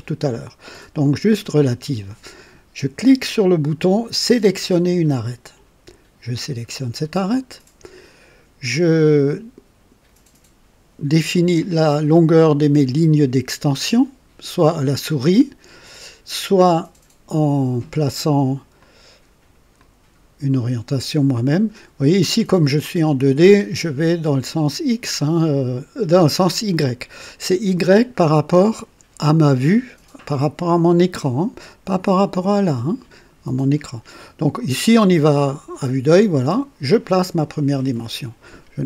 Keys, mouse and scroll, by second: 4.8 click, 6.6 click, 18.8 click, 19.8-21.2 drag, 26.1-27.6 drag, 36.5 click.